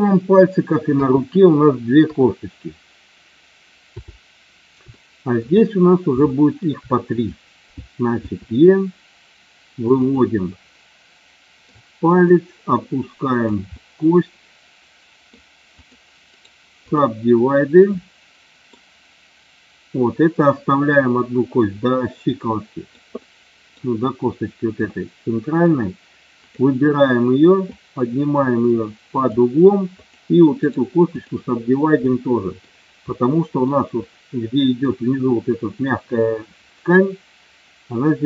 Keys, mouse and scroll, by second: 0.8 KP_2, 1.9 KP_3, 3.8 KP_7, 4.8 shift+middle click, 6.3 shift+middle click, 8.1 e, 10.0 click, 10.6-11.7 middle drag, 12.2-13.3 drag, 13.9-15.2 middle drag, 15.6 click, 16.2 right click, 18.0 middle click, 22.6 middle click, 23.1 middle click, 24.8 middle click, 26.4 click, 27.7-29.2 drag, 30.6 right click, 32.0 middle click, 33.1 middle click, 34.0 middle click.